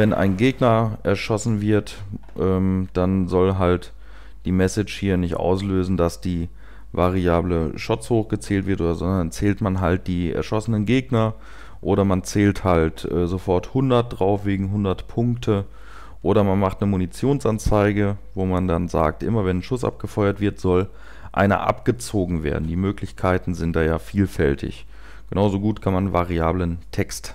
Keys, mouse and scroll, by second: 0.3 typing.